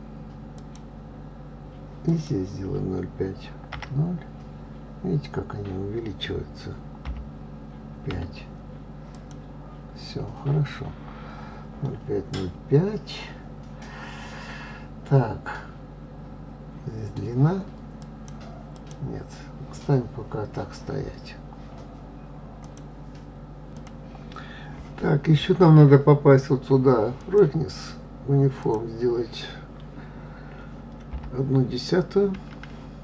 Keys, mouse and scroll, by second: 2.3-5.3 drag, 12.0-12.9 scroll down 3, 14.4-17.4 scroll down 2, 18.3 click, 19.0 click, 27.7 click, 29.2-32.1 drag.